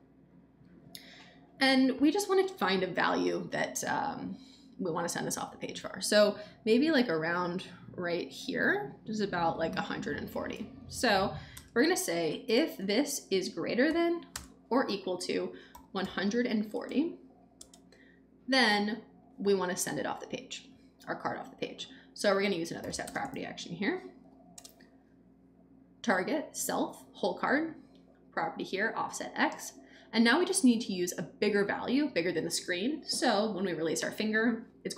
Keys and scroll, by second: 11.5 space, 12.2 shift+space, 12.5 shift+., 13.8 =, 14.3 space, 15.4-16.7 typing, 22.3-23.9 typing, 24.2 Down, 24.5 Return.